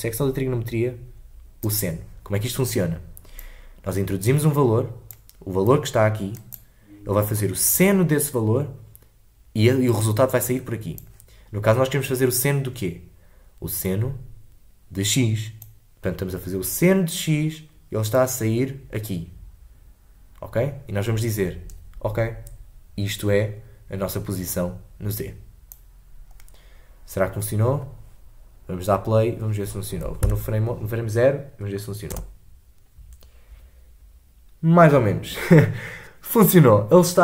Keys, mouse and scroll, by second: 3.3-6.5 drag, 11.0-26.6 drag, 27.3-30.2 scroll down 2, 30.2 shift+Left, 32.1 space.